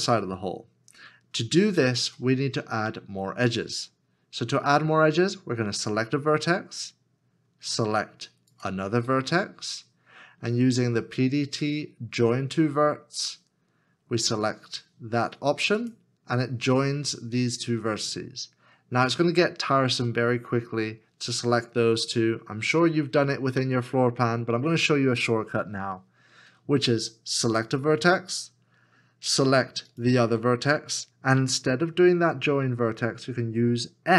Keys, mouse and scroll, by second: 8.5 shift+click, 28.9 s, 29.9 shift+click.